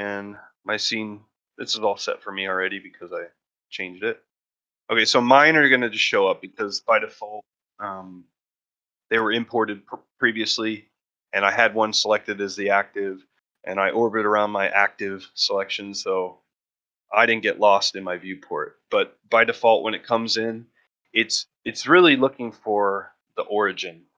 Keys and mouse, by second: 5.3 shift+middle drag, 5.6 middle drag, 6.1 shift+middle drag, 6.4-6.7 middle drag, 6.9 shift+middle drag, 11.5-12.9 middle drag, 13.0 shift+middle click, 13.3-15.2 middle drag, 15.4-16.0 middle drag, 16.1-16.5 middle drag, 16.8-17.3 middle drag, 18.7 middle drag, 19.3 ctrl+middle click, 19.6 shift+middle drag, 20.2 middle drag, 20.6 shift+middle drag, 21.5-22.0 ctrl+middle drag, 22.3-22.6 shift+middle drag, 22.7-23.0 ctrl+middle drag.